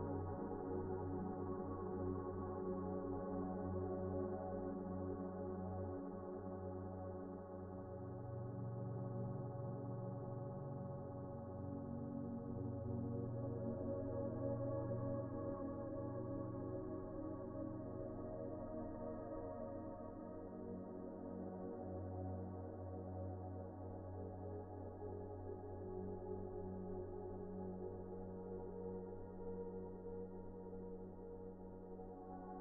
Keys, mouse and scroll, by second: 0.3 scroll up 1, 0.5-2.0 scroll down 1, 2.0-2.5 scroll up 1, 2.5-4.0 scroll down 1, 4.1 scroll up 1, 4.4 shift+middle click, 4.6 shift+scroll down 1, 4.9 shift+middle click, 5.2-5.8 scroll up 2, 5.4 shift+middle click, 5.9 shift+middle click, 6.2 scroll up 1, 6.4 shift+middle click, 6.7 shift+scroll down 1, 7.8 scroll up 1, 8.1 shift+middle click, 8.8 1, 11.1 typing, 11.6 Escape, 13.2 Return, 14.1 typing, 14.8 Return, 15.8 typing, 16.4 Return, 17.4 typing, 18.7 Return, 19.6 right click, 20.3-20.7 scroll down 1, 21.5 middle click, 22.4-23.2 typing, 23.4 Return, 24.7-25.3 typing, 28.2 typing, 30.5 Tab, 30.9-31.6 typing, 31.3 Tab, 31.9 Tab.